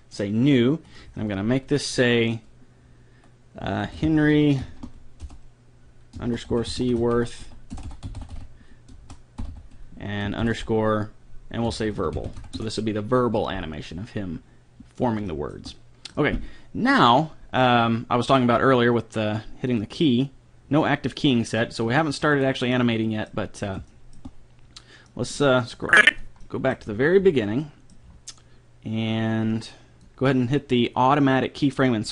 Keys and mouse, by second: 7.9 BackSpace, 9.0 BackSpace, 19.7-21.5 drag, 22.4 right click, 22.7 click, 25.9-27.6 drag, 29.6-31.4 drag, 31.8-32.1 drag.